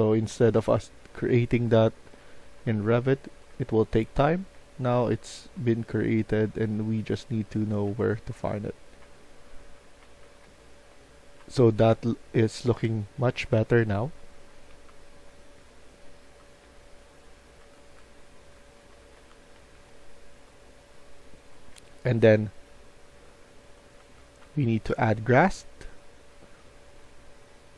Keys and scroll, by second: 0.0-14.8 typing, 16.6-22.1 typing, 23.9-25.0 typing.